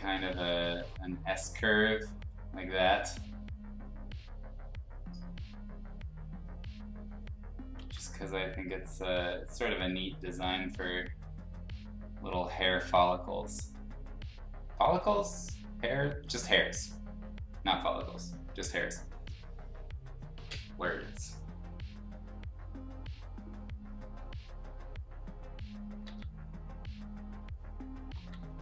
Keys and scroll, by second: 0.5 ctrl+z, 0.6 ctrl+z, 7.7 ctrl+z, 15.8 ctrl+z, 26.0 ctrl+z, 28.1 ctrl+z.